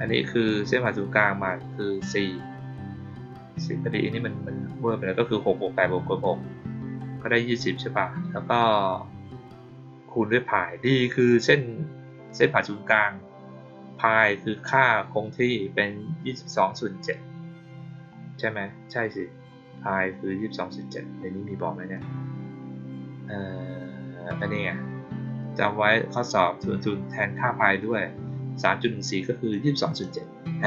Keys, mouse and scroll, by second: 0.0 middle click, 14.6 middle click, 15.2 middle click, 17.7 middle click, 18.3 middle click, 19.2-21.9 middle drag, 21.9-22.8 scroll down 2, 22.8 scroll down 1, 23.0-24.0 middle drag, 29.4 click.